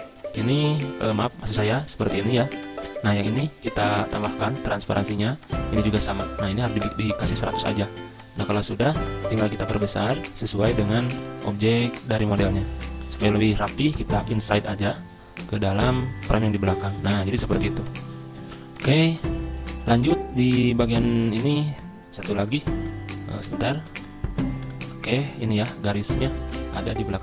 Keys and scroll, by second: 21.4 ctrl+Page_Up, 22.8 ctrl+Page_Up, 23.4 ctrl+Page_Down, 23.8 ctrl+Page_Down, 24.7 ctrl+Page_Up, 27.0 ctrl+Page_Down.